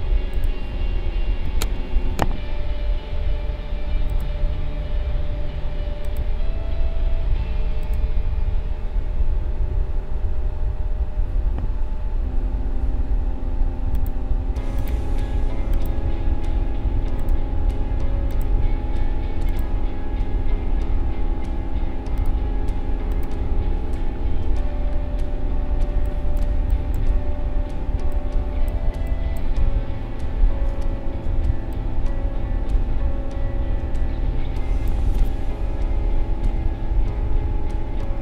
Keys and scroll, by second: 2.0 ctrl+s, 25.8 space.